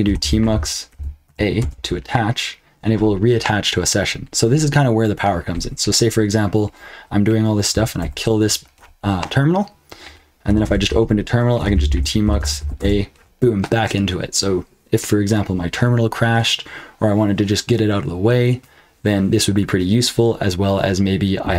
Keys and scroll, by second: 0.0-1.2 typing, 1.6 Return, 8.0 super+q, 10.6 super+Return, 11.3-13.1 typing.